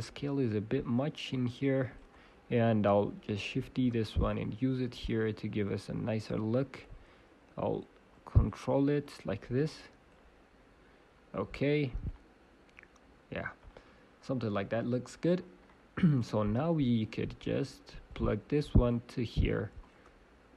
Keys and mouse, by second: 0.9 click, 3.7 shift+d, 7.1-11.0 drag, 12.1-13.8 drag, 18.0-19.8 drag.